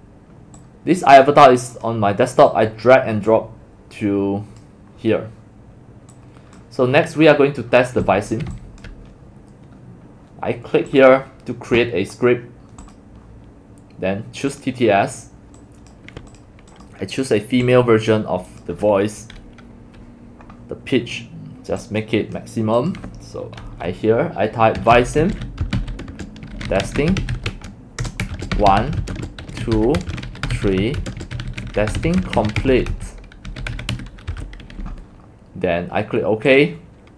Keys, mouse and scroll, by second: 0.6 click, 1.8 click, 2.5-4.6 drag, 5.5 middle click, 6.2 click, 8.0 z, 8.2 click, 11.6-11.9 drag, 14.5 click, 15.6 click, 24.6-34.4 typing.